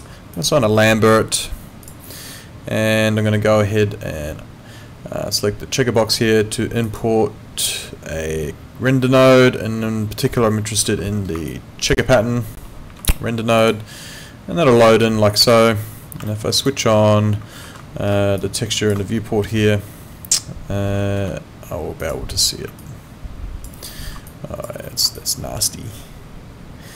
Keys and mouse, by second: 0.3 click, 1.8 click, 6.9 click, 10.8 ctrl+2, 13.6 click, 16.3 alt+middle click, 16.5 alt+right click, 17.7 ctrl+2, 21.2 Escape, 22.0 click, 22.8 alt+click, 23.9 alt+middle click, 24.3 alt+click, 24.8 alt+middle click, 25.2 alt+click.